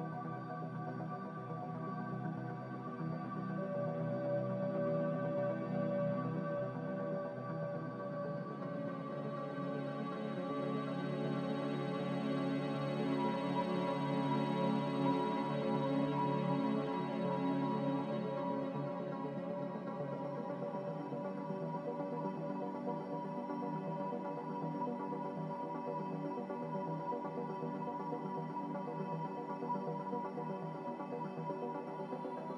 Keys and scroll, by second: 19.1 x, 25.6 c.